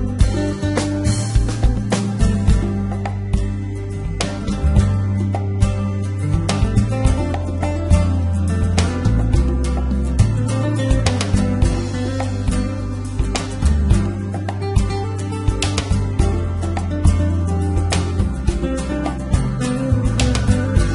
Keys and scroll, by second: 10.0 g, 10.9 y, 18.8 g, 19.3 x, 20.3 Escape.